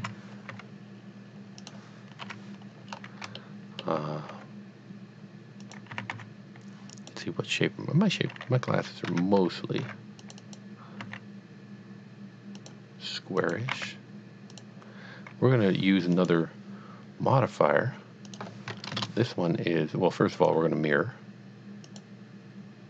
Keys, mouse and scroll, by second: 0.0-0.5 typing, 0.0 KP_Enter, 1.6 click, 2.2 KP_1, 2.9 scroll up 1, 3.4 shift+middle click, 4.8 g, 5.6 click, 5.9 s, 6.2 x, 6.9 click, 9.1 Tab, 9.8 ctrl+r, 10.2 click, 10.4 double click, 11.0 s, 12.7 click, 13.4 click, 13.8 e, 14.6 click, 16.2 click, 18.3 click, 18.9 KP_0, 19.0 KP_Enter, 20.4 click, 21.9 click.